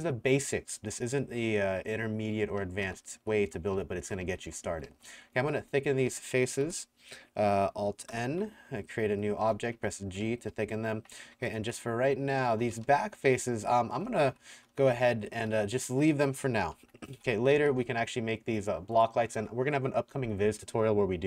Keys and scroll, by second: 0.0-6.7 typing, 8.1 alt+n, 9.2-17.5 typing, 17.2 Delete.